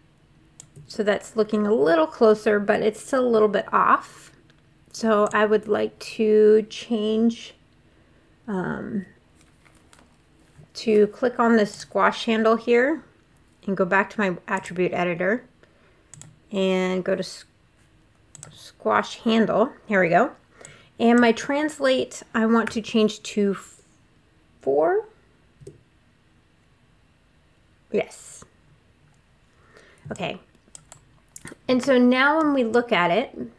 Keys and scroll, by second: 22.4 4, 25.4 Return.